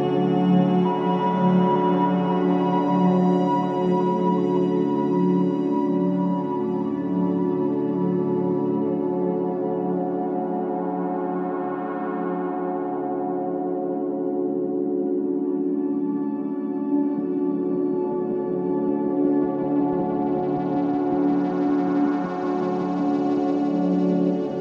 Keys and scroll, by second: 6.5 0, 6.7 Return, 10.0 3, 11.7 4, 15.8 ., 16.1 0, 16.5 5, 16.8 Return, 22.3 2, 23.9 Delete.